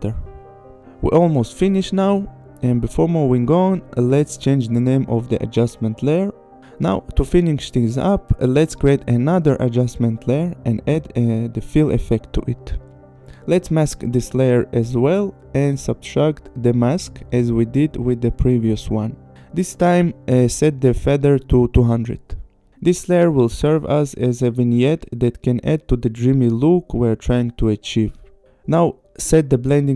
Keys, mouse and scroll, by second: 2.5 click, 4.1 click, 5.2 Return, 5.7 ctrl+c, 6.1 click, 6.3 ctrl+v, 6.5 Return, 7.1 ctrl+v, 7.5 Return, 8.3 click, 8.6 right click, 10.2 click, 12.2 click, 12.7 f, 12.9 i, 13.1 l, 13.8 click, 16.2 click, 17.9 click, 19.7 click, 20.4 click, 20.8 KP_2, 21.0 KP_0, 21.2 Return, 23.4 click, 25.4 click, 28.6 click.